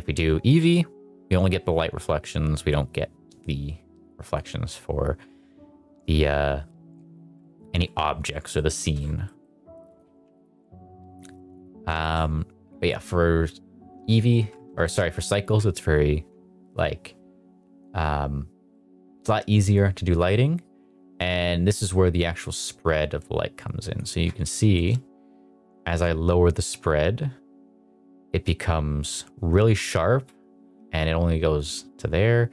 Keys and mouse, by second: 8.4 middle click, 8.7 shift+middle drag, 9.2 middle drag, 9.8 click, 10.1 x, 11.4 click, 11.9 shift+middle drag, 14.7 shift+middle click, 19.7-23.9 drag, 24.6 shift+middle drag, 25.8-29.0 drag, 31.5-32.5 drag.